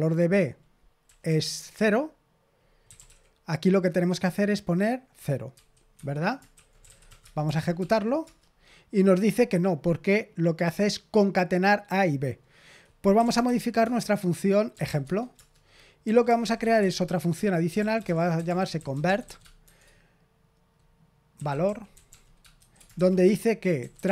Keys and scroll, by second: 1.0-3.5 typing, 5.5-7.5 typing, 5.9 Escape, 7.7 ctrl+p, 8.2 Return, 12.8-19.6 typing, 21.0-24.1 typing.